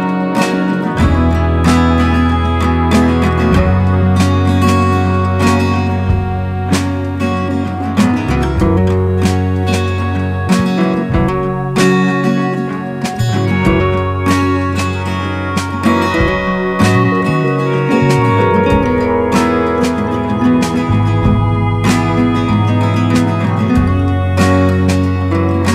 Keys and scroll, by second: 1.0 [, 1.5 [, 1.5 [, 2.4 alt+space, 3.0 ], 10.7 ctrl+alt+shift+e, 20.6 alt+space, 22.0-22.8 typing.